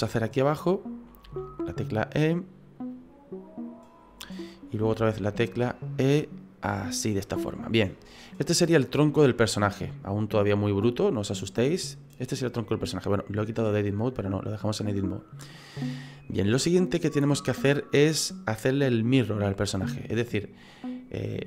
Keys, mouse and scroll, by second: 0.1 right click, 0.5 middle click, 1.2 e, 4.8 e, 7.5 middle click, 10.0 click, 11.3 middle click, 13.5 click, 19.2 middle click.